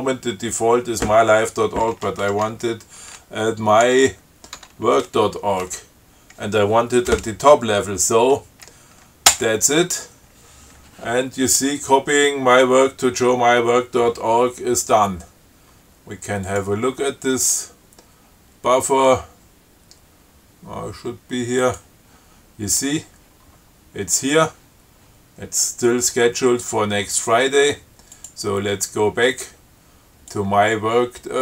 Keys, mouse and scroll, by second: 2.5 m, 2.7 y, 4.1 w, 4.8 Tab, 9.6 Return, 16.7 click, 21.8 click, 28.4 click, 30.6-31.4 drag.